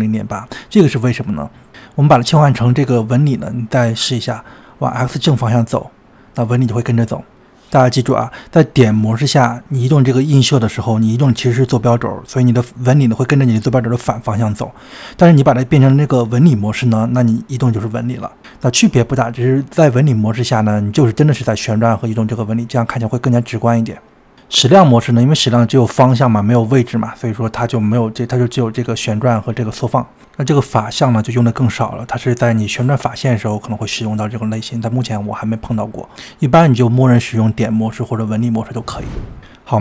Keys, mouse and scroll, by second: 3.0-8.9 drag, 10.6-18.6 drag, 19.9-27.0 drag, 28.9-32.0 drag, 32.8-35.8 middle drag, 35.8-37.6 drag, 37.6-39.2 middle drag, 39.6 middle click.